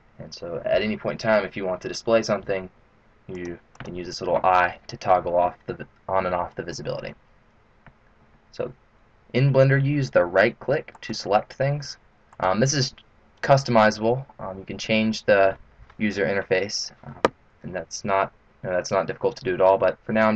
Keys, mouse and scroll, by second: 3.3 click, 3.8 click, 11.4 right click, 12.7 right click.